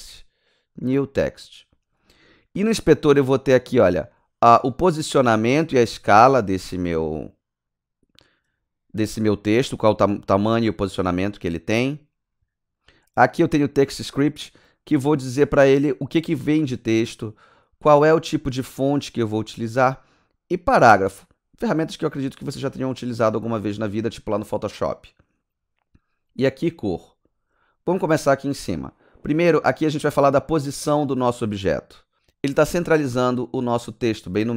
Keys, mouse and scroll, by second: 1.6-2.6 scroll up 8, 4.3 scroll up 1, 11.7 scroll down 1, 12.6 scroll down 1, 14.2 scroll down 1, 25.3 scroll down 4, 27.0-27.6 scroll up 7.